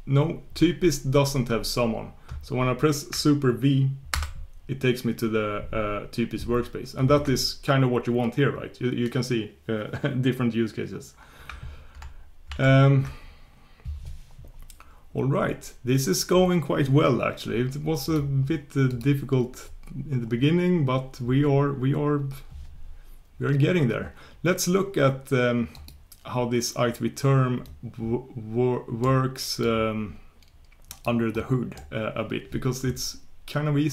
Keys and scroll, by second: 12.5 super+1, 29.9 super+1.